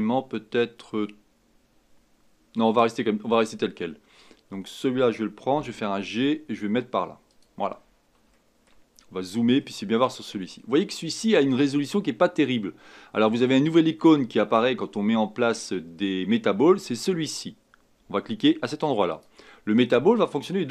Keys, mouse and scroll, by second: 1.8 scroll up 1, 5.5 g, 8.3-8.9 shift+middle drag, 8.9-9.3 scroll up 6, 9.6-19.1 shift+middle drag, 19.1 click.